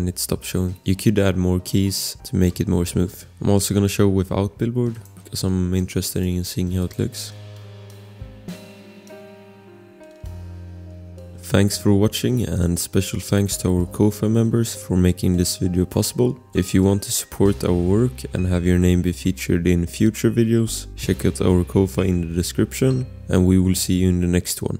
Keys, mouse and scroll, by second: 0.8 click, 3.1 scroll, 4.9 click, 6.8 click, 7.4 scroll, 8.2 click, 9.5-9.9 scroll, 9.9 click.